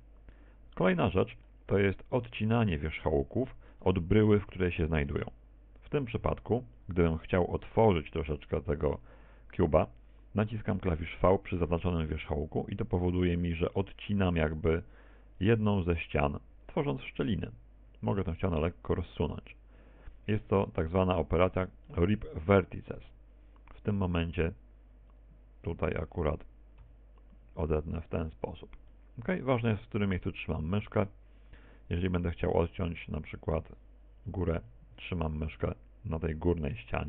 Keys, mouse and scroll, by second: 0.9 f, 2.0 a, 2.9 middle click, 3.9 middle click, 4.7 shift+middle click, 5.1-7.1 scroll up 3, 7.8 right click, 14.2 v, 17.6 click, 18.0 right click, 18.5 g, 22.4 click, 22.4 middle click, 24.9 right click, 25.9 g, 27.2 click, 28.8 v, 30.2 click, 31.0 middle click, 31.8 shift+middle click, 32.7 right click, 33.1 middle click.